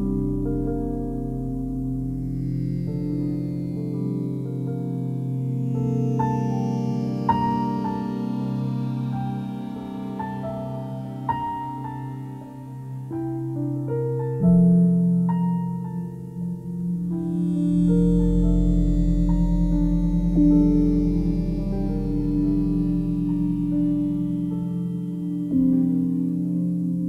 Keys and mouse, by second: 0.6 g, 2.5 click, 3.2 click, 4.3 g, 5.7 Escape, 6.4-7.9 alt+drag, 10.0 g, 11.0 x, 11.7 Escape, 12.7 click, 13.5 g, 13.8 x, 14.7 click, 15.1-19.3 alt+drag, 20.1 f, 20.8 alt+click, 22.1-23.8 typing, 22.5 click, 26.8 click.